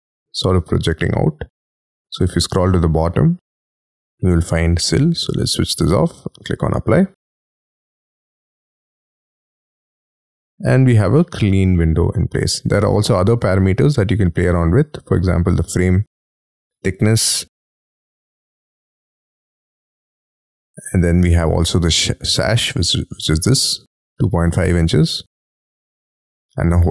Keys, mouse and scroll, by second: 10.1-11.1 scroll down 17, 11.1 middle click, 15.4-16.7 scroll up 2, 22.3-26.7 scroll up 4.